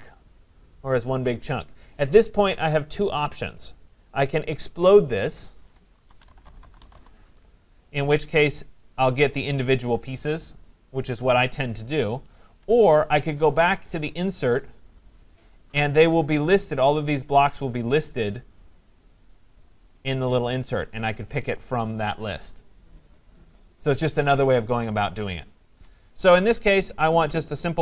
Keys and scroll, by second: 6.9 Return, 12.4 Escape, 25.7 Escape.